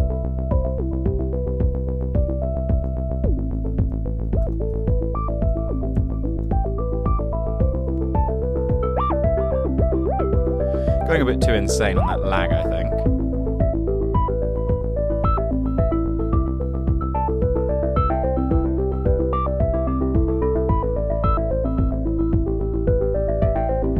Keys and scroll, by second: 3.6 super+a, 4.2-7.0 typing, 5.5 super+a.